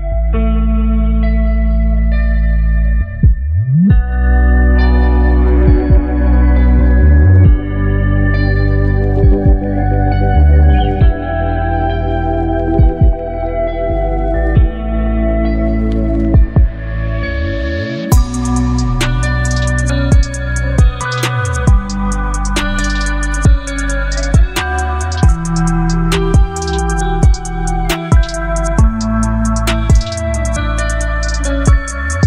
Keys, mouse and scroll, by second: 1.2-2.6 scroll up 1, 5.3-18.8 drag, 19.7 click, 22.2-22.9 scroll up 1, 28.9 click.